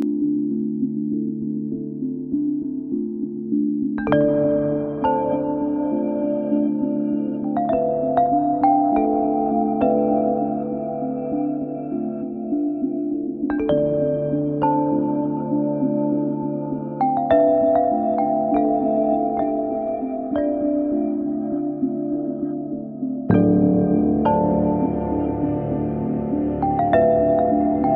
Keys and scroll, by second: 0.6 b, 6.3 a, 10.4 t, 12.3 t, 20.9 y, 22.8 Escape, 24.7 y, 25.2 y, 25.5 y.